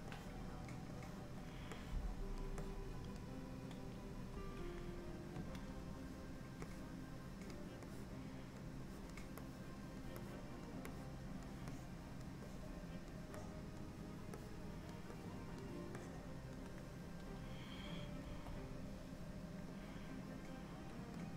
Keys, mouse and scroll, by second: 0.2 click, 1.0 click, 1.8 click, 2.7 click, 4.4 KP_1, 5.4 ctrl+KP_1, 6.7 click, 8.0 click, 9.0 click, 9.5 click, 10.3 click, 11.0 click, 11.8 click, 12.6 click, 13.5 click, 14.4 click, 15.3 click, 18.3 KP_1, 19.9 click.